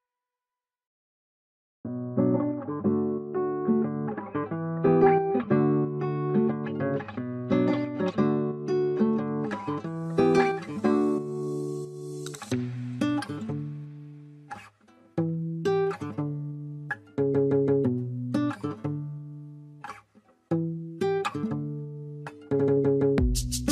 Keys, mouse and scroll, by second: 1.2 right click, 3.7 right click, 5.2-6.6 scroll up 1, 8.8-9.2 scroll down 1, 9.9 scroll up 1, 17.4 scroll up 1, 17.5 Escape, 21.6 space.